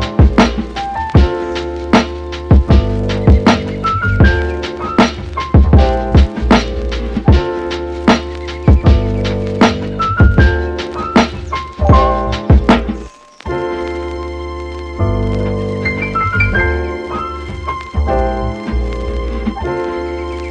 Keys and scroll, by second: 0.6 super+z, 1.5 super+z.